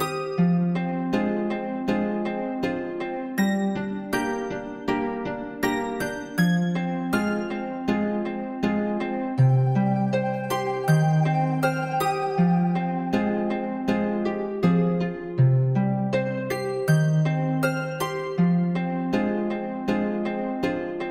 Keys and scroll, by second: 11.2 [.